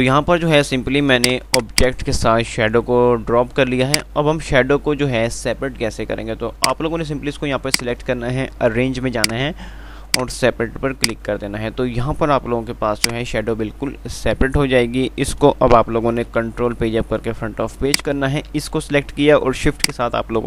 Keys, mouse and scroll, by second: 6.8 click, 13.0 Delete, 13.2 click, 13.7 F3, 15.4 click, 16.6 shift+Page_Up, 19.8 shift+click.